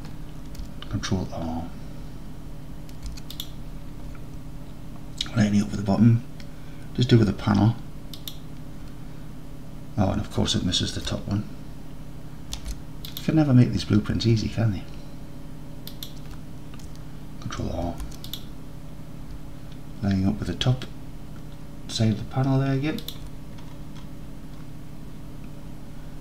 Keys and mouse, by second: 3.0 ctrl+r, 8.2 shift+click, 12.6 ctrl+r, 16.0 shift+click, 17.9 ctrl+r, 23.1 shift+click.